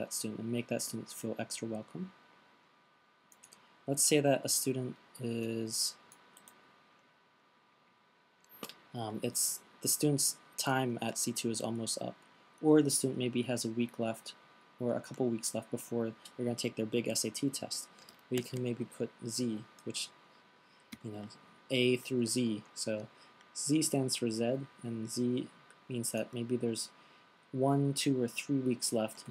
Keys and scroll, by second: 6.7 fn+Delete, 18.8 shift+z.